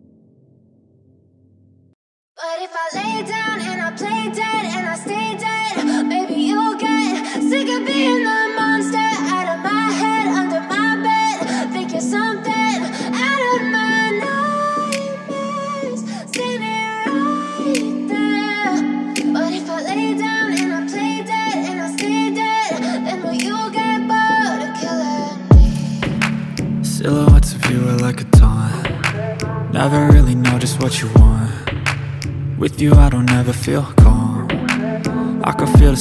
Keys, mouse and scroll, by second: 9.8 click, 24.3 ctrl+click.